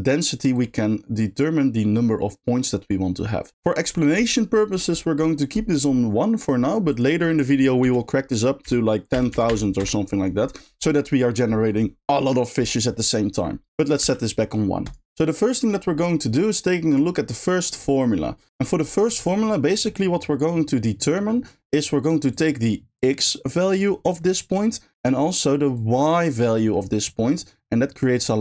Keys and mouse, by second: 0.7-3.5 drag, 7.0-9.8 drag, 9.3 0, 9.5 0, 13.8-14.9 drag, 16.0 middle click, 16.5 middle click, 22.3-23.9 drag, 25.7-27.0 drag, 28.0-28.4 drag.